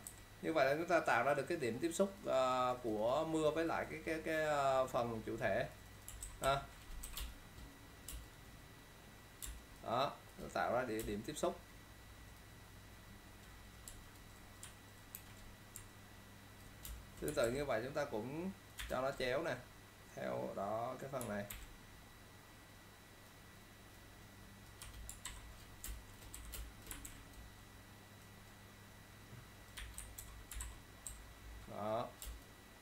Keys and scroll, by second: 0.2 e, 6.3 ctrl+0, 6.5 -, 7.1 v, 7.3 space, 9.6 ctrl+space, 15.3 ctrl+e, 16.9 alt+space, 17.5 ctrl+t, 21.6 ctrl+t, 25.4 ctrl+0, 26.0 ctrl+space, 26.4-27.2 typing, 30.5-31.2 typing, 30.7 ctrl+0.